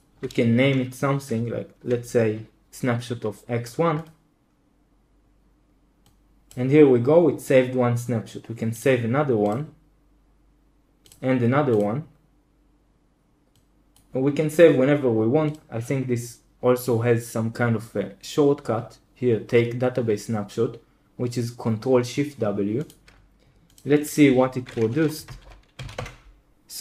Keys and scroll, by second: 25.4 super+h, 25.5-26.4 typing.